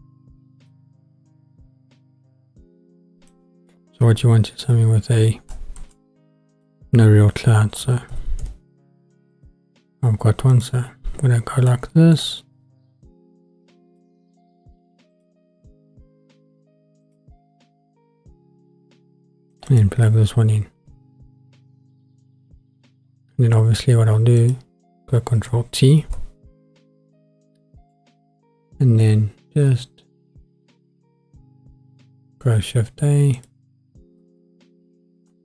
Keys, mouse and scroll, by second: 0.0 click, 3.3-3.7 drag, 4.6 Delete, 5.8 shift+a, 10.8-12.2 scroll down 4, 11.7 middle click, 13.0-14.0 drag, 15.1 click, 24.4 click, 26.0 ctrl+t, 27.5 middle click, 33.5 click.